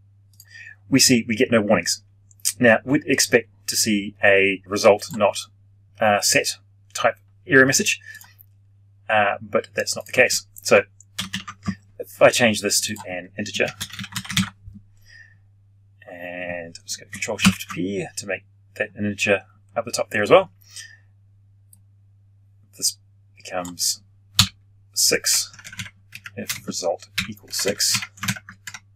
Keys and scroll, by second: 11.1 ctrl+/, 17.4 ctrl+alt+shift+p, 28.2 ctrl+shift+Left.